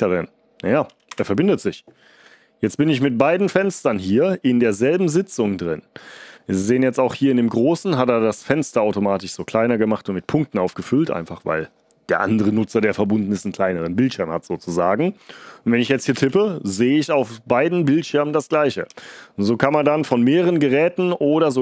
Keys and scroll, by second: 1.0 Return, 15.5-16.6 typing, 18.8-20.0 typing.